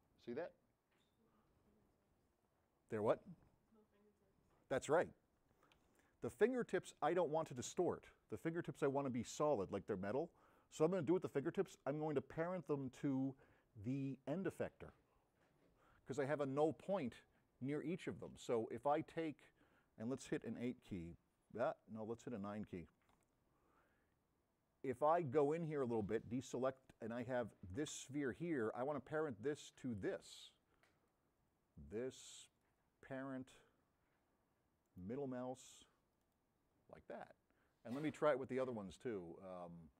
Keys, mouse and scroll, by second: 22.4 click, 25.0 middle click, 25.8 drag, 28.1 click, 29.8 click, 34.9 middle click, 36.2 right click.